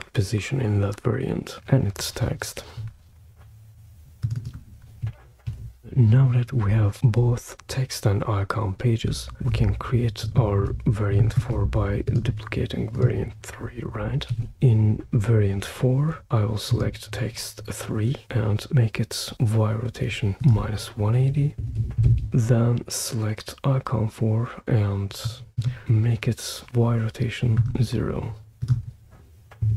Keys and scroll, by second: 1.5 super+c, 5.4 super+v, 14.3 super+d, 21.3-22.5 typing, 29.6 0.